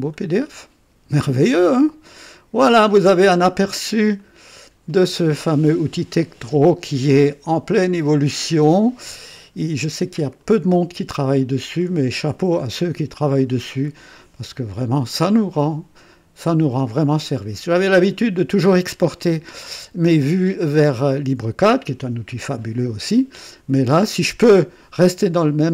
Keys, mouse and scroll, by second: 2.5 ctrl+click, 4.2 click, 10.3-12.0 middle drag.